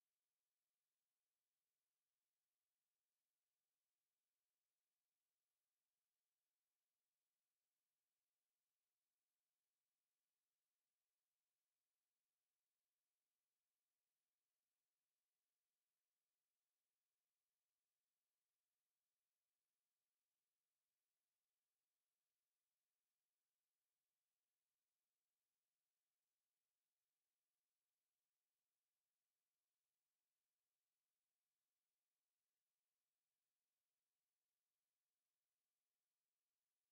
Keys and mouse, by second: 1.7 middle click, 4.5-6.3 middle drag, 8.7 s, 12.8-14.9 drag, 14.9 KP_7, 17.1 s, 20.0 click, 22.1 s, 25.8-26.5 middle drag, 28.1 KP_7, 29.6-30.7 middle drag, 31.6-33.7 middle drag, 33.7 Tab, 35.7 shift+d.